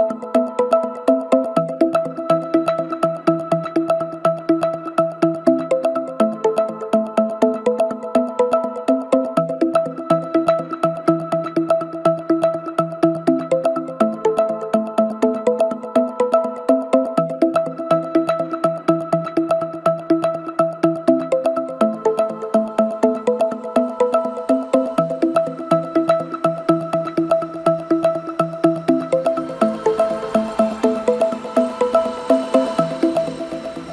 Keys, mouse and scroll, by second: 4.3 KP_7, 6.3 ctrl+r, 11.1 ctrl+r, 13.8-14.2 scroll down 1, 14.2-15.1 middle drag, 15.1 ctrl+KP_7, 15.8-16.4 scroll up 1, 16.4 3, 17.1 drag, 18.7 x, 19.7-20.2 scroll up 1, 20.2 2, 20.7 click, 21.3 scroll down 2, 21.8-23.9 right drag, 23.9 scroll up 1, 24.1-24.6 scroll down 1, 24.6 Tab, 25.4 KP_1, 26.4 KP_Divide, 27.4 g, 32.0 KP_7, 32.9-33.9 scroll up 2.